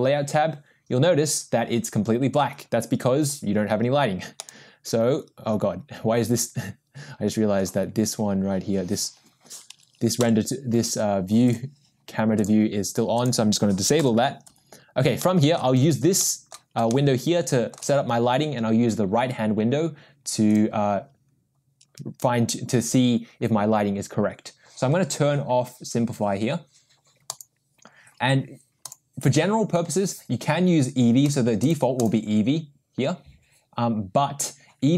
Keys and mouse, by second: 0.0-0.6 drag, 4.4-7.7 middle drag, 10.2 n, 11.4 click, 12.4 click, 14.0 n, 16.2-16.8 middle drag, 16.9-18.6 shift+middle drag, 20.5 click, 27.4 drag, 28.9-31.1 drag, 31.7-33.6 drag.